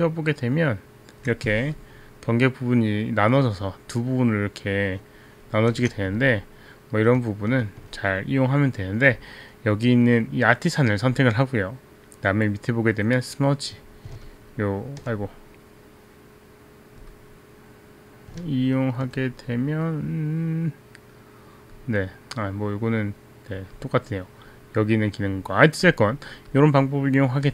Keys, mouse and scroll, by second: 2.0 click, 3.8 click, 7.9 right click, 10.5 click, 13.5 click, 14.1 click, 15.0 alt+right click, 17.2 click, 19.0 alt+right click, 23.0 click, 26.1 click, 27.0 click.